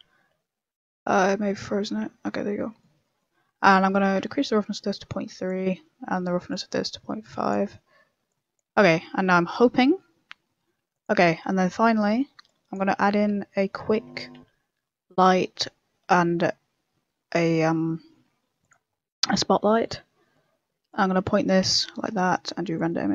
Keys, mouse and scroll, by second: 1.4 m, 1.4 n, 2.4-3.0 scroll up 3, 2.4 n, 2.5 middle click, 3.0 middle click, 3.3-3.7 scroll up 6, 4.3 click, 4.3 scroll up 1, 5.6 middle click, 6.4 click, 8.7 click, 11.2 click, 12.4 click, 13.2 KP_0, 13.9 Tab, 14.0 scroll down 3, 14.3 shift+a, 18.8-19.1 scroll down 10, 19.5 g, 20.0 scroll up 4, 20.2 middle click, 20.8 click, 21.9 KP_0, 22.7 click.